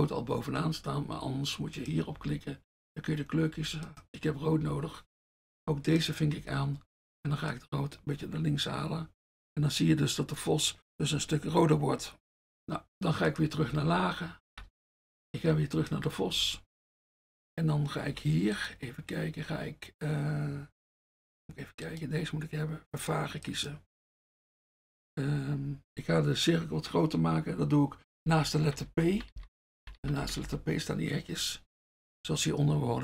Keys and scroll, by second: 2.3 F1, 4.6 F1, 6.4 F1, 13.9 F1, 14.4 F1, 14.6 F1, 16.4 F1, 24.1 F1, 28.3-30.5 typing.